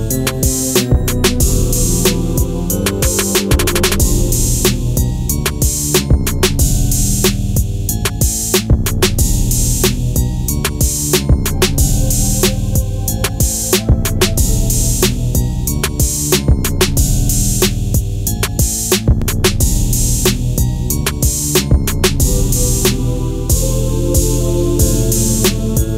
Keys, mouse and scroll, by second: 3.0 click, 8.4 click, 11.6-12.4 scroll down 1, 14.5 scroll up 1, 15.0 right click, 18.3 click, 23.4 click.